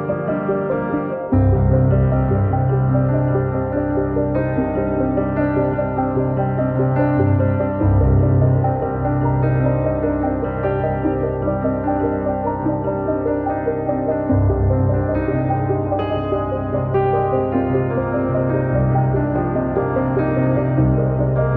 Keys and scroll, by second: 0.6 Return, 1.1 Escape, 3.6 Return, 11.5 space, 11.7 Escape, 14.1 Delete.